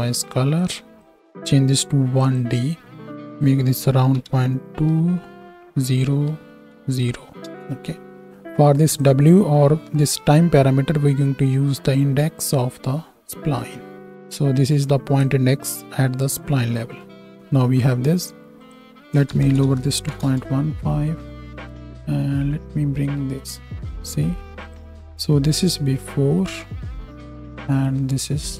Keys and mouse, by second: 0.7-1.0 drag, 8.3-9.0 drag, 9.0-24.7 middle drag, 24.7-28.5 drag, 26.2 m, 28.1 m.